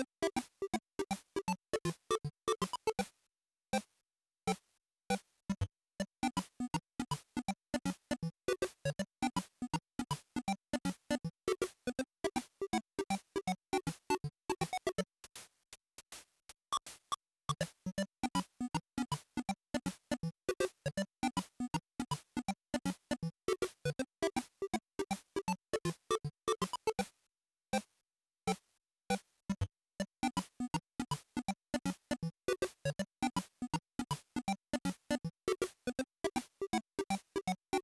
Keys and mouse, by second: 4.0-5.5 drag, 13.1 click, 15.4 click, 17.4 z, 20.4-21.7 drag, 22.9 click, 31.7-37.3 drag.